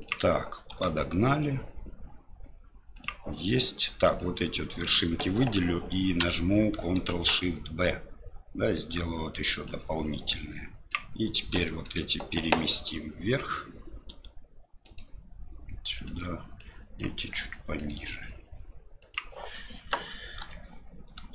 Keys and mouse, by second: 0.0 s, 0.7 g, 4.2 click, 7.1 ctrl+shift+b, 10.1 click, 11.6 shift+middle click, 14.1 g, 16.6 click, 17.3 g.